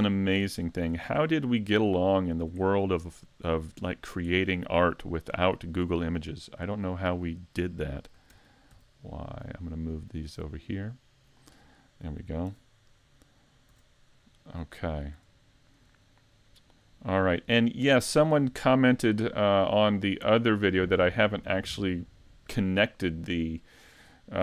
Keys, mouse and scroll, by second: 0.7 shift+right click, 1.4 shift+middle click, 2.2-2.9 scroll down 2, 2.7 shift+middle click, 3.4 middle click, 4.3 shift+middle click, 5.3 middle click, 6.5 middle click, 6.7 shift+middle click, 8.3 shift+d, 12.0 middle click, 12.5 a, 13.7 a, 14.0 middle click, 15.0 scroll down 2, 15.5 shift+middle click, 16.1 middle click, 17.4 scroll up 3, 17.8 shift+middle click, 20.5 middle click, 22.5 middle click.